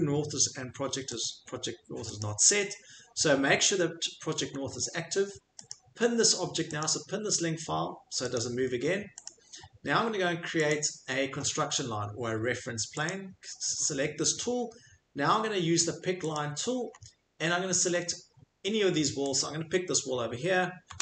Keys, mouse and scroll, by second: 1.2 click, 2.2 click, 4.5 middle click, 5.7 click, 6.8 click, 8.3 click, 9.2 click, 10.7 click, 13.0 click, 16.9 scroll, 17.8 scroll, 19.4 click, 19.4-20.1 scroll, 20.1 scroll.